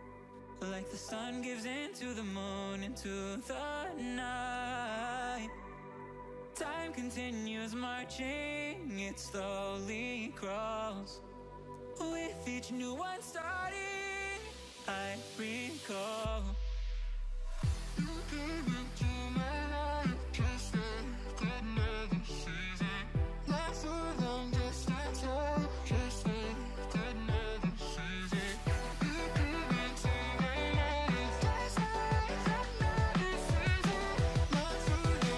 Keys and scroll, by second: 4.3 ctrl+z, 7.8 ctrl+=, 12.8 ctrl+z, 19.6 ctrl+-, 19.8 ctrl+0, 20.2 ctrl+=, 27.1 ctrl+z.